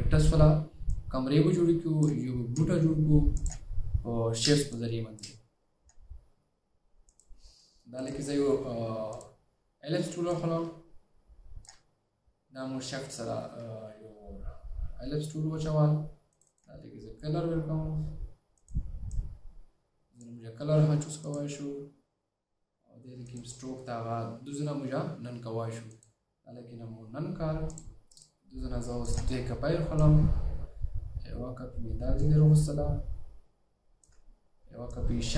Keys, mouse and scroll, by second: 4.9-5.3 space, 7.6 space, 8.1 right click, 10.5 right click, 16.6 double click, 30.1 alt+click, 35.0 alt+click.